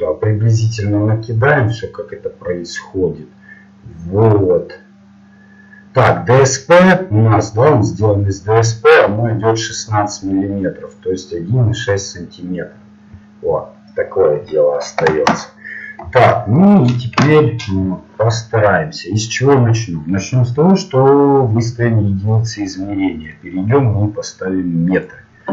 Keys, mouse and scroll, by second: 0.0-11.3 typing, 2.3-18.9 drag, 18.9-25.0 middle drag, 25.0-25.5 drag.